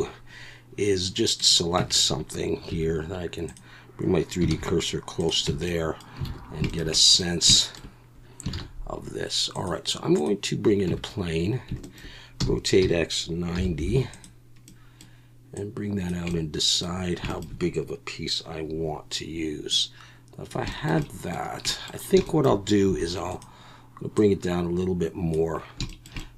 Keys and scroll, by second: 1.8 Tab, 2.7 2, 4.5 shift+s, 5.5 Tab, 6.3 alt+a, 8.5 shift+a, 10.4 shift+a, 10.9 Tab, 12.4 r, 12.8 x, 13.5 9, 13.8 0, 22.9 2.